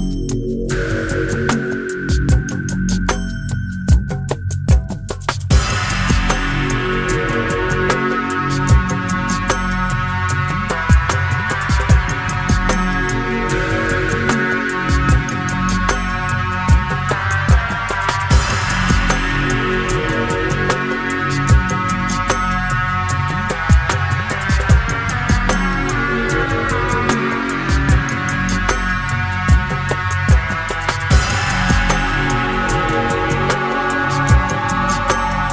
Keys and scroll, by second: 0.4 ctrl+r, 1.1 Escape, 2.5 alt+s, 11.0 alt+s, 13.1 alt+s, 15.1 ctrl+e, 17.1 ctrl+e, 22.2 ctrl+r, 22.5 Escape, 34.4 ctrl+e.